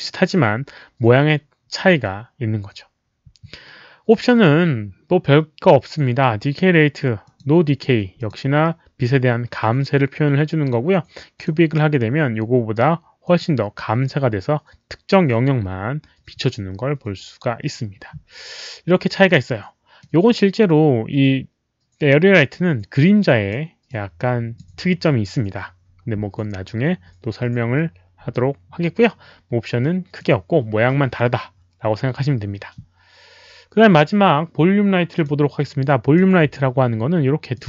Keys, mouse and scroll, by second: 7.2 click, 7.6 click, 8.1 click, 11.3 click, 13.2 click, 18.0 click, 19.2 click, 19.9 click, 22.5-23.4 drag, 23.8-24.5 drag, 29.7 click, 35.1 click, 36.1 click, 37.5 click.